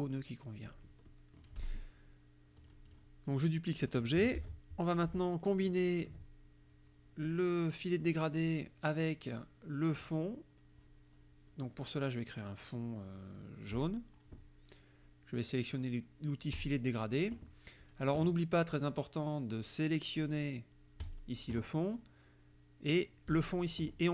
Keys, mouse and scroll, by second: 0.7 click, 1.1 click, 2.7 click, 3.4 click, 4.4 ctrl+d, 5.0-6.3 ctrl+drag, 13.8 click, 16.6 click, 21.1 click, 23.3 click.